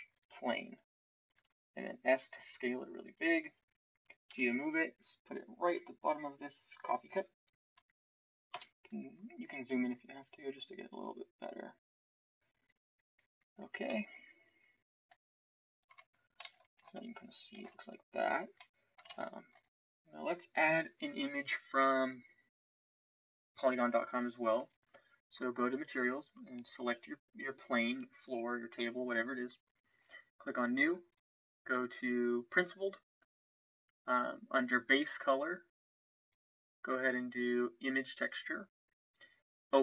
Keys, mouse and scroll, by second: 1.3 s, 8.5 KP_Decimal, 16.4 shift+z, 17.5 ctrl+s, 19.1 click, 19.1 shift+z.